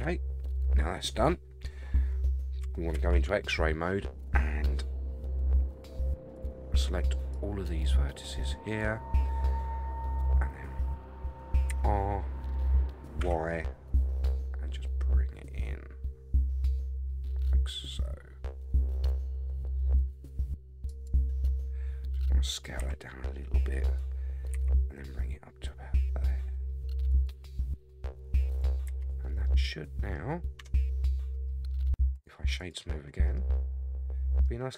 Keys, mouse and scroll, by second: 0.5-1.7 scroll up 7, 1.7-2.4 scroll down 1, 2.4 scroll down 1, 2.9 alt+z, 6.3 click, 7.3-8.8 drag, 11.7 r, 22.8 s, 24.5 g, 27.5-27.8 scroll down 5, 28.8 alt+z, 29.4 middle click, 30.6 Tab, 31.2 middle drag, 32.1 right click, 33.2 middle drag, 33.2 scroll up 1, 33.5-34.4 middle drag, 34.7 scroll down 3.